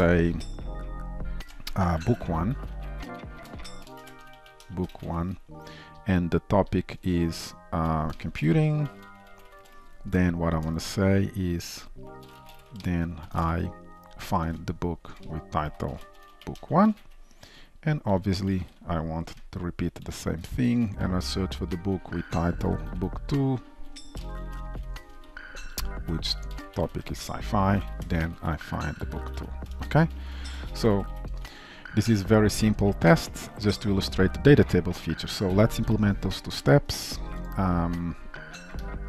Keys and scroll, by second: 2.8 ctrl+shift+Right, 14.5 Return, 20.1 ctrl+d, 23.8 ctrl+shift+Right, 26.0 ctrl+shift+Left, 30.6 ctrl+s, 38.9 alt+Return.